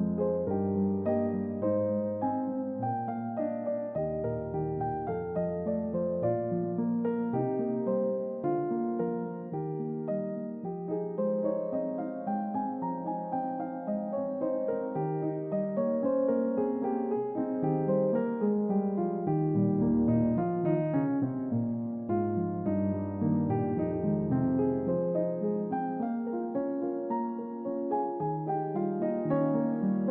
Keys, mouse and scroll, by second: 3.2 scroll down 2, 6.6-7.6 middle drag, 8.1 click, 8.8-14.3 middle drag, 16.5 click, 19.0 click, 19.8 click, 21.3 click, 22.5 typing, 22.8 Return, 24.5 click, 26.7 click, 27.8 5, 27.9 Return.